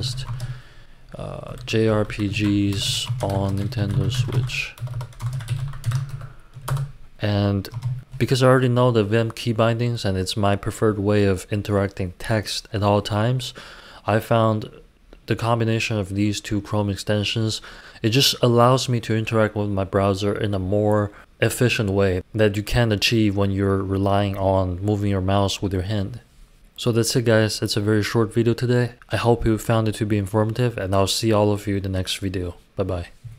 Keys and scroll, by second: 0.0-6.7 typing, 7.7 space, 8.0 Return, 8.0 BackSpace.